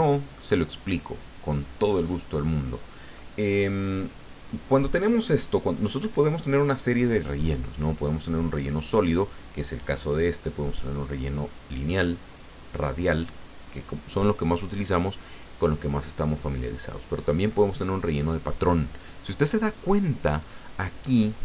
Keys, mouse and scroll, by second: 1.0-3.1 drag, 8.7 click, 10.8 click, 12.4 click, 17.6 click.